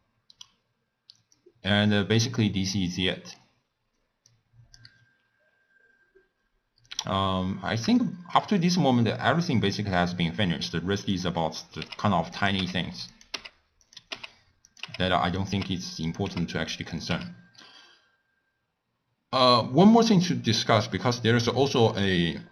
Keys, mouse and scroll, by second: 1.3-2.4 drag, 2.4-2.9 scroll down 2, 2.9 scroll down 1, 3.0-4.2 middle drag, 4.2 click, 7.9-11.1 shift+middle drag, 11.1 click, 11.8-17.1 typing, 12.3 click, 13.1 click, 13.8 click, 14.6 click, 15.3 click, 16.0 click, 16.9 click, 19.5-21.1 middle drag, 21.1 click.